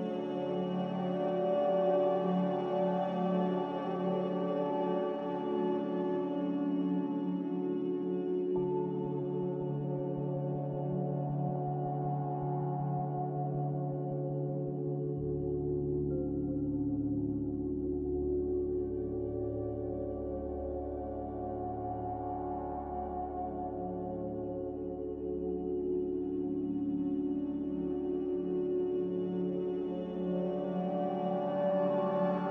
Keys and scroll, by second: 2.9 ctrl+z, 4.7 ctrl+z, 9.4-10.5 typing, 12.7-13.5 typing, 31.9 z.